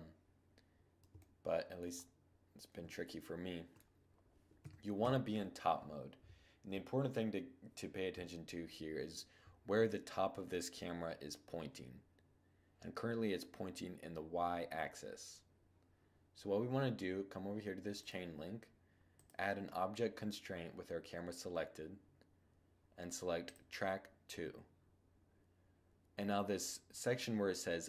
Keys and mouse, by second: 3.8 5, 4.2 5, 17.1-20.2 drag, 20.2-22.6 middle drag.